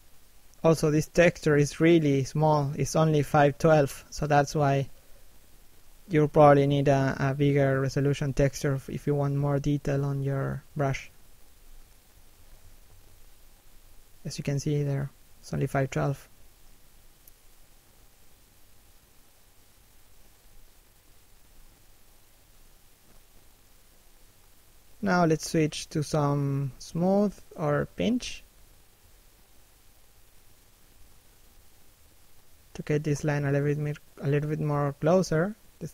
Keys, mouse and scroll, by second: 2.3 middle click, 3.0-3.4 scroll down 1, 3.4 shift+middle click, 4.7 middle click, 5.6 shift+middle click, 6.3 shift+click, 9.4 middle click, 10.5 shift+middle click, 11.9-12.9 scroll up 1, 14.4-14.9 scroll down 2, 14.9 shift+middle click, 15.6 shift+click, 18.9 middle click, 20.7 shift+middle click, 21.1 middle click, 24.3 s, 24.7 middle click, 25.2-25.5 scroll up 1, 25.5 p, 25.8-26.2 scroll up 1, 26.2 shift+middle click, 29.5 click, 31.3 click, 32.5 middle click, 33.3 f, 33.7 click, 35.1 click.